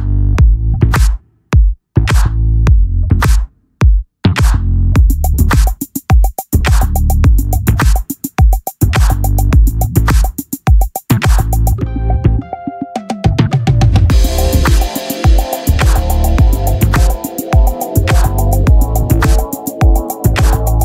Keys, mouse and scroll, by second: 0.5-2.8 drag, 2.8-4.2 middle drag, 4.2-7.6 drag, 7.6-9.7 right drag, 8.5 r, 11.7-13.8 right drag, 13.8-15.1 middle drag, 19.1 z.